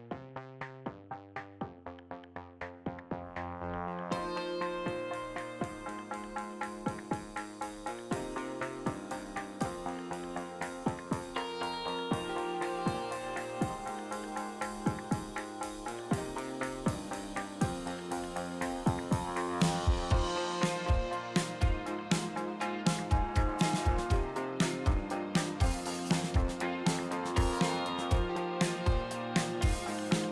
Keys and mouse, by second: 2.2 click, 2.9 middle click, 3.7 click, 4.6 click, 5.7 click, 6.4 click, 6.9 ctrl+z, 7.2 middle click, 7.5 shift+middle click, 8.4 ctrl+z, 8.6 KP_Divide, 9.1 middle click, 9.4 click, 10.4 click, 10.9 middle click, 11.8 click, 12.3 middle click, 12.7 ctrl+z, 14.0 middle click, 15.0 click, 16.2 click, 16.5 click, 17.0 middle click, 17.4 click, 18.5 middle click, 19.0 click, 19.3 ctrl+z, 19.6 middle click, 22.2 ctrl+z, 23.9 middle click, 24.6 KP_Divide, 25.1 middle click, 27.5 middle click, 28.0 click, 28.3 click, 28.6 click, 29.0 click, 30.2 middle click.